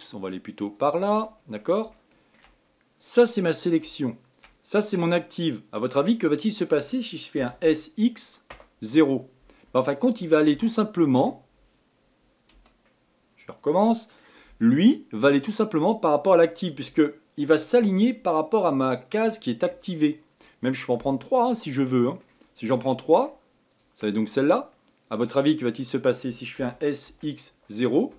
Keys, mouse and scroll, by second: 1.4-4.5 middle drag, 4.5 shift+click, 5.4-7.6 middle drag, 7.6 s, 13.1-16.1 middle drag, 21.6-23.9 middle drag, 23.9 shift+click, 24.4-26.8 middle drag, 26.8 s.